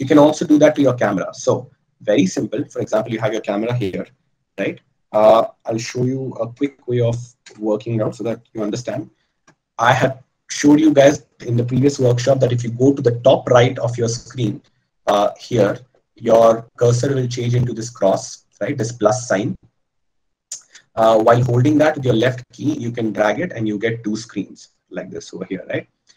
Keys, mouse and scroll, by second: 7.1 KP_0, 7.8 KP_0, 11.2 a.